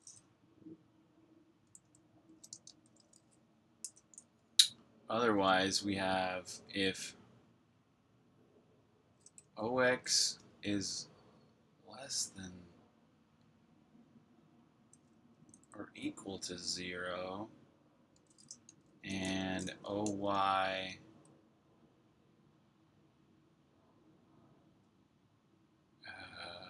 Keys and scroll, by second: 1.6 BackSpace, 2.4 Return, 2.5 Tab, 8.9-10.6 typing, 15.3-16.5 typing, 18.1-20.7 typing.